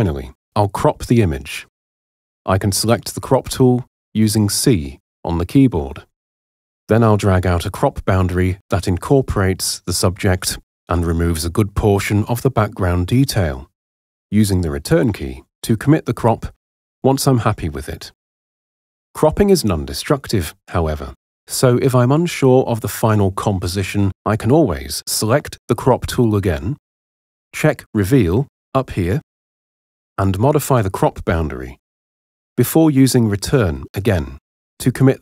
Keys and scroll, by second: 3.5 c, 16.5 Return, 25.0 c, 34.4 Return.